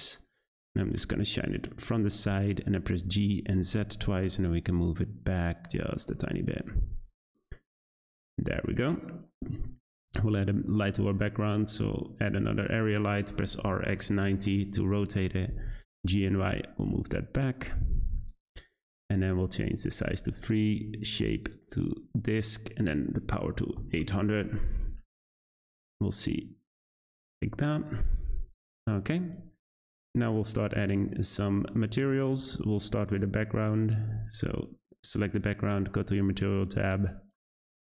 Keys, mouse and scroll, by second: 3.0 g, 8.3-8.6 scroll down 2, 8.6 middle drag, 8.9-9.9 scroll down 5, 9.9 shift+a, 13.2 r, 15.2 g, 19.6 click, 20.6-23.7 drag, 23.7 0, 24.6 `, 26.2-27.8 scroll up 3, 27.8 click, 33.0 click, 35.4 click, 36.7-37.8 drag.